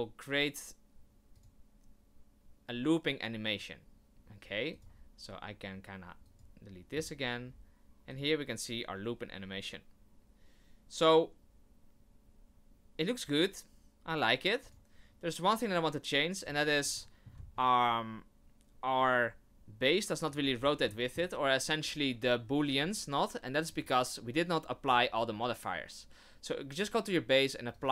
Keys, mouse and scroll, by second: 6.4 click, 6.9-7.4 scroll up 4, 7.4-8.1 scroll down 3, 8.1 click, 14.6 click, 16.4 click, 16.9 shift+middle click, 17.4 scroll up 3, 20.2 click, 20.5 scroll down 5, 20.9 shift+middle click, 22.5 right click, 23.7 click, 27.7 click.